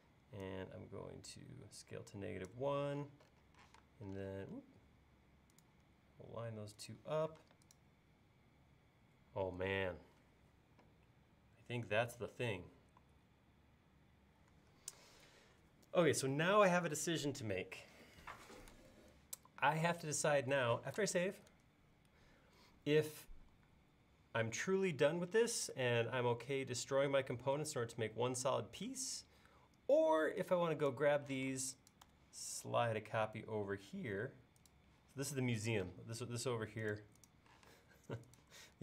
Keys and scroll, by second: 3.7 m, 7.4 space, 21.3 super+s, 31.4 m, 35.9 space, 37.6 m.